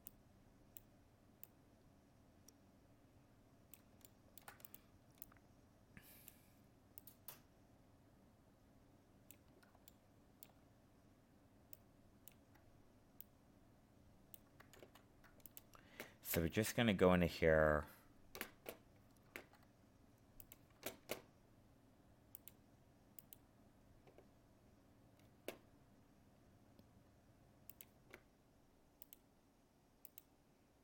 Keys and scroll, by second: 14.7 ctrl+z.